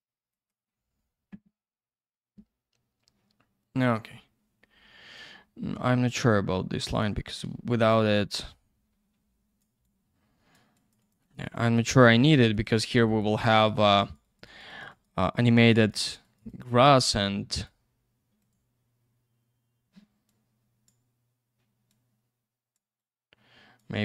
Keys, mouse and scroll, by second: 0.3 click, 0.5 click, 5.1 click, 6.2 click, 7.4 ctrl+я, 8.3 click, 9.8 click, 10.7 click, 10.9 click, 11.0 click, 11.1 double click, 11.2 click, 11.3 click, 11.4 click, 11.5 double click, 11.6 click, 11.7 click, 11.8 click, 11.9 double click, 12.0 click, 12.1 click, 12.2 click, 12.3 double click, 12.4 click, 12.5 click, 12.6 click, 12.7 double click, 12.8 click, 12.9 click, 13.1 click, 13.2 double click, 13.3 click, 13.4 click, 13.5 click, 13.7 double click, 13.8 click, 13.9 click, 14.0 click, 14.1 double click, 14.2 click, 14.4 click, 14.4 click, 14.6 double click, 14.7 click, 14.8 click, 14.9 click, 15.0 double click, 15.1 click, 15.2 click, 15.3 click, 15.4 double click, 15.5 click, 15.7 click, 15.7 click, 15.9 double click, 16.0 click, 16.1 click, 16.2 click, 16.4 double click, 16.5 click, 16.6 click, 16.7 click, 16.8 double click, 17.5 click, 17.6 click, 18.6 click, 20.3 click, 21.9 click, 23.0 click.